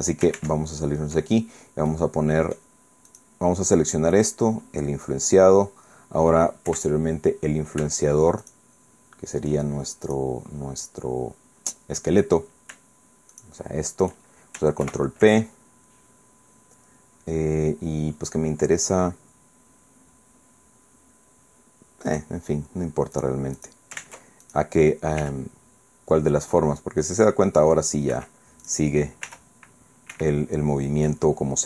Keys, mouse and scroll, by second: 0.3 ctrl+Tab, 1.9 click, 3.1 right click, 6.7 KP_1, 8.4 shift+right click, 10.1 right click, 13.3 shift+right click, 14.8 ctrl+p, 22.1 click, 23.1 click, 23.6 click, 24.0 ctrl+Tab, 24.5 ctrl+click, 25.2 r, 28.1 Escape, 28.7 right click, 29.3 r, 30.1 Escape, 30.4-30.7 scroll down 2, 31.1-31.6 middle drag.